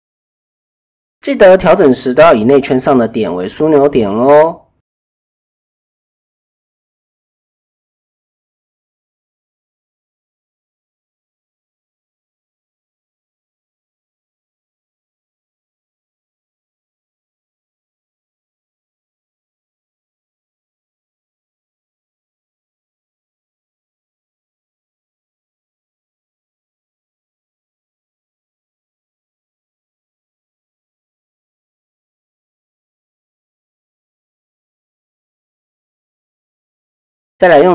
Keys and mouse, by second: 0.7 s, 3.4 click, 4.0 shift+click, 5.2 middle click, 6.2 shift+click, 7.0 KP_3, 7.9 s, 8.7 s, 10.5 middle click, 11.0 shift+middle click, 11.4 middle click, 13.0 KP_3, 13.9 s, 17.6 s, 21.4 middle click, 22.6 shift+click, 23.1 KP_3, 23.9 s, 26.9 click, 27.7-28.8 middle drag, 28.8 click, 29.1 KP_1, 29.9 shift+middle click, 31.0 click, 32.2 shift+middle click, 32.3 shift+click, 33.0 click, 33.4 middle click, 34.3 shift+click, 35.0 KP_1.